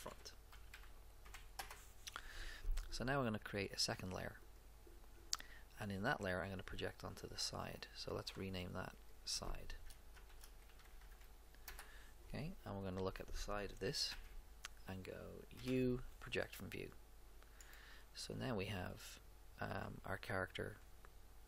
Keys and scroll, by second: 0.0-1.7 typing, 10.0-11.5 typing, 11.7 Return, 14.1 Page_Down, 15.5 u.